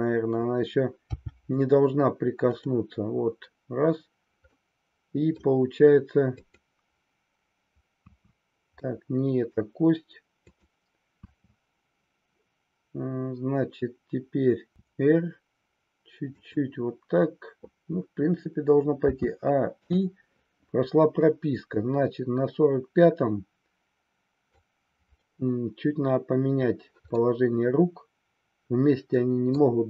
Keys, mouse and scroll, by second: 1.2 g, 2.5 click, 4.5 middle click, 4.5 scroll up 1, 6.4 click, 8.0 KP_3, 8.9 middle click, 10.4-11.8 drag, 14.7 r, 16.4 click, 19.1 a, 19.7 i, 21.2-24.6 drag, 27.1-29.6 middle drag.